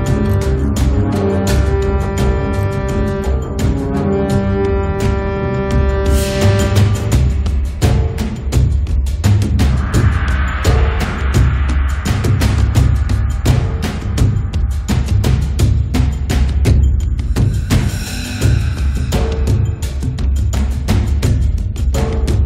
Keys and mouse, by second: 1.1 middle click, 1.4-8.8 drag, 5.4-8.1 middle drag, 8.4-10.1 middle drag, 10.1 KP_3, 12.4 click, 13.1 f, 13.6-15.1 drag, 15.5 click, 18.5 click, 18.9 middle click, 19.1-21.3 drag, 21.3 middle click, 21.7-22.4 drag.